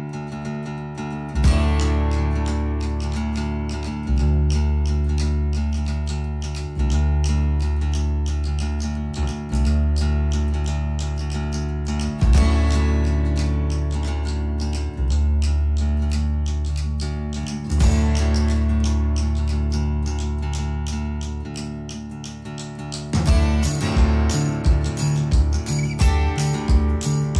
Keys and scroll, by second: 16.7 0, 18.9 space, 19.6 ctrl+z, 23.2 space, 24.5 Escape, 27.2 b.